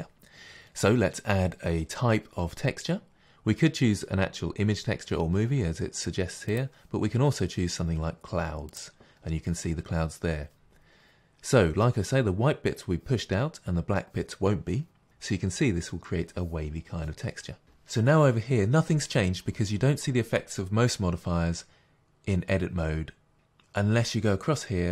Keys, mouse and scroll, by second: 8.7 click, 17.6 middle click.